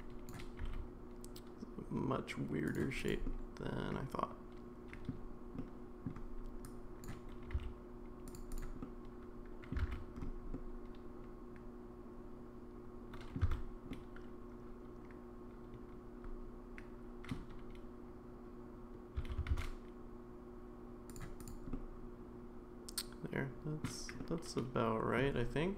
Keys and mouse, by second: 0.6 g, 3.0 click, 3.2-5.1 middle drag, 5.6 middle click, 6.7 click, 7.4 g, 8.5 click, 8.8 middle click, 9.9 alt+z, 10.6-13.4 middle drag, 13.9 Tab, 13.9-17.3 middle drag, 19.1 s, 21.7-23.8 middle drag, 24.2-25.2 middle drag.